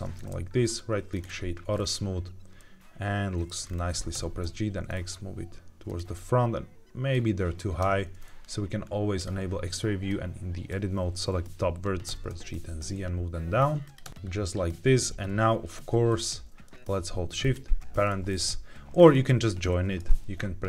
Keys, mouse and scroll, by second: 0.6 right click, 1.7-2.5 scroll down 2, 2.5 middle click, 2.5-3.4 scroll down 1, 3.6-4.0 scroll up 2, 4.0 g, 4.3 x, 5.8 click, 6.1 middle click, 7.7 Tab, 9.1 click, 10.0 click, 12.0 g, 12.2 z, 13.7 click, 13.9 Tab, 14.1 middle click, 14.1-14.5 scroll down 2, 16.0 click, 17.3 shift+click, 18.9 scroll up 2, 20.4-20.6 scroll up 1.